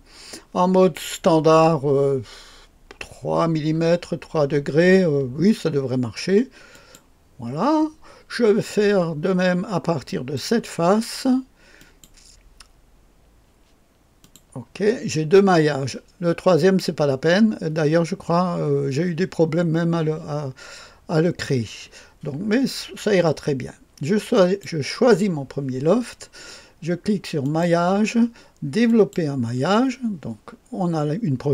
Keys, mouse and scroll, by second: 6.6 click, 10.0 click, 11.7 click, 14.1 click, 24.3 click, 27.3 click, 28.8 click.